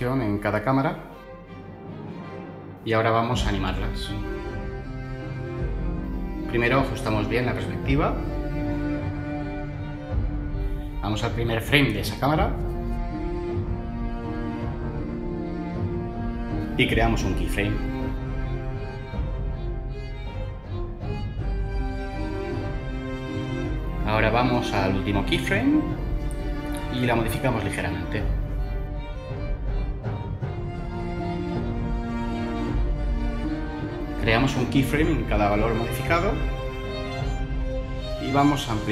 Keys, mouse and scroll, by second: 25.7 Left.